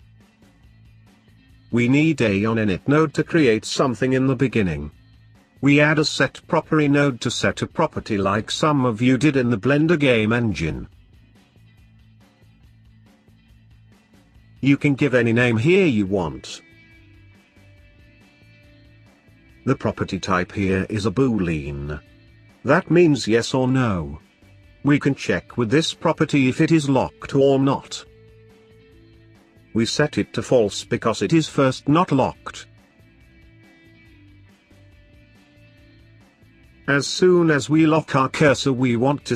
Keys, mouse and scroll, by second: 0.1-1.7 middle drag, 1.7 shift+a, 5.3 shift+a, 11.2 click, 12.4 scroll up 3, 12.5-14.5 middle drag, 14.5 click, 15.5 click, 18.6 click, 18.6 BackSpace, 23.2 shift+a, 24.4 o, 25.9 BackSpace, 26.0 BackSpace, 31.0 click, 31.9 click, 32.9 scroll down 2, 33.1-34.7 middle drag, 34.7 click, 35.8 shift+click, 38.6 click, 38.6 shift+d.